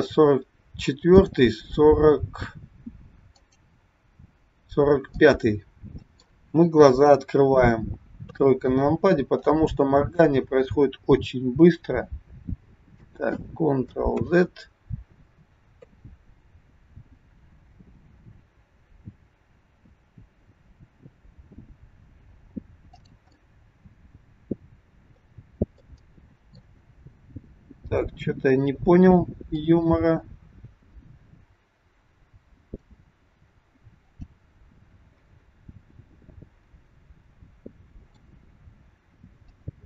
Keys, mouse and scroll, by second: 1.2 click, 3.5 click, 5.2 middle click, 8.1 KP_3, 9.3 click, 11.6 r, 14.2 ctrl+z, 15.6 KP_3, 17.1 r, 23.3 middle click, 25.5-25.8 scroll up 3, 25.8 middle click, 26.8-28.5 scroll down 3, 29.7 click, 34.1 click, 34.9-35.3 scroll up 2, 35.3 middle click, 39.4 click.